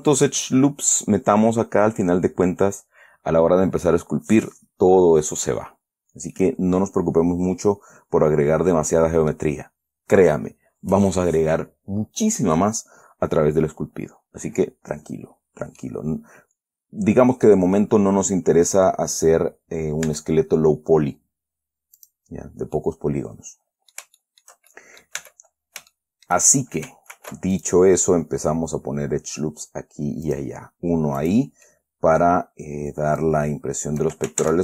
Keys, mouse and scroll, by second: 6.7 middle click, 7.1 scroll down 2, 16.1-18.0 middle drag, 20.4 Tab, 22.3 click, 23.1-25.0 middle drag, 25.1 shift+middle click, 25.5 Tab, 25.8-26.2 scroll up 2, 26.3 shift+middle click, 27.5 ctrl+r, 27.9 ctrl+click, 30.6 click, 31.5 click, 32.0 click, 33.5-34.5 drag.